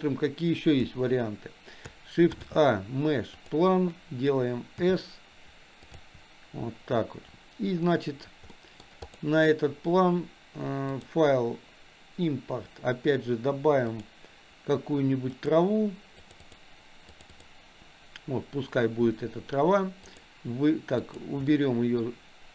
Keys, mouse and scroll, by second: 0.0 click, 0.9 Delete, 2.3 shift+a, 4.8 s, 8.5-8.8 middle drag, 11.0-14.2 drag, 20.0 click, 21.0 click, 21.5-22.0 middle drag.